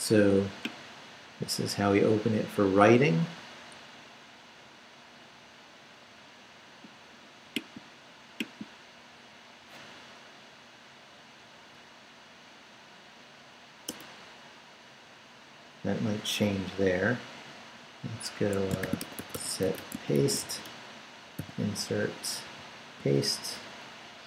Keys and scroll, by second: 13.9 Return, 18.3 Escape, 18.6-21.4 typing, 22.4 super+v, 23.3 super+Up.